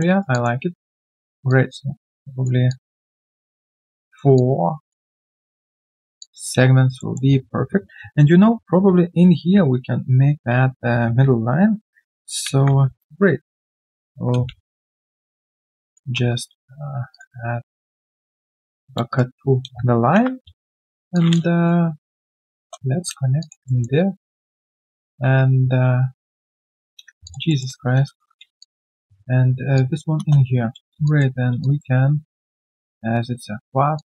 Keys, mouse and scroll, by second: 0.1 alt+right click, 0.3 alt+click, 2.7 alt+click, 3.4 alt+middle click, 3.7 alt+click, 4.0 alt+middle click, 4.3 alt+click, 6.2 alt+click, 6.5 alt+q, 6.9 alt+middle click, 14.0 ctrl+click, 14.8 right click, 14.8 q, 15.8 double click, 17.6-19.0 typing, 19.3 alt+q, 20.1 ctrl+shift+x, 22.5 Return, 22.9-23.4 scroll down 1, 23.4 alt+click, 23.6 alt+middle click, 27.2 alt+click, 27.4 alt+middle click, 30.1 Return, 30.4-31.0 scroll down 1, 31.0 alt+click, 31.6 alt+click.